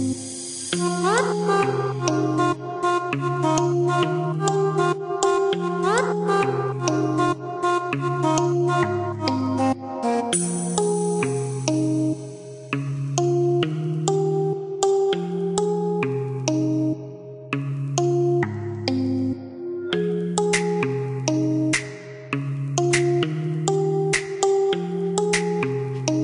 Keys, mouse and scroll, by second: 0.7 click, 2.5 click, 4.5 click, 10.9 click, 11.5 click, 12.3 KP_2, 12.6 KP_Decimal, 12.9 KP_3, 13.6 KP_Enter, 14.5 KP_Enter, 16.3 click, 18.8 click, 20.2 click, 21.4 click, 22.5 click, 23.3 KP_0, 23.7 KP_3, 24.4 KP_Add, 24.7 KP_1, 25.3 KP_2, 26.0 Return.